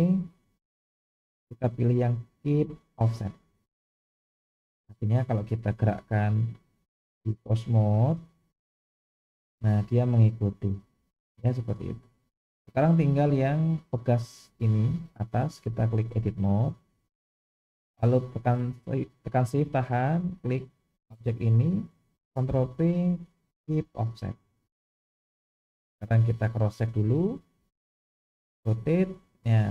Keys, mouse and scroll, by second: 5.1 click, 7.0 click, 8.8 r, 13.9 click, 15.4-16.1 drag, 20.4 shift+click, 22.4 ctrl+p, 25.8-26.5 drag, 27.7 click, 28.6 r.